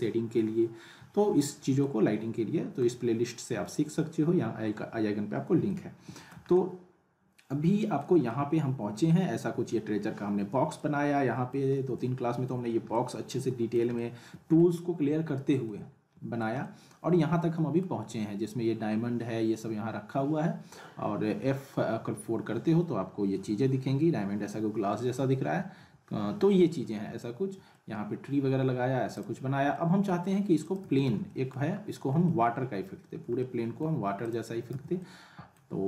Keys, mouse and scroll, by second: 1.8-3.0 alt+middle drag, 9.2-9.8 scroll up 2, 10.7-11.7 alt+middle click, 11.7 scroll up 1, 12.2-12.6 alt+middle click, 13.2-13.9 alt+middle click, 14.2-14.6 middle drag, 15.9-16.6 alt+middle click, 22.1 F4, 22.8-23.4 scroll up 1, 25.4 F4, 26.7-27.0 scroll down 1, 27.2-27.8 alt+middle drag, 27.9-28.4 scroll down 1, 29.2 click, 29.4 scroll up 1, 29.7-30.3 alt+middle click, 30.6 click, 30.8 z, 31.2 alt+middle click, 31.7-32.2 scroll up 1, 32.2-32.8 alt+middle click, 33.0-33.4 scroll up 1, 33.4-34.0 middle click, 34.2 click, 34.7 z, 35.0-35.6 alt+middle drag.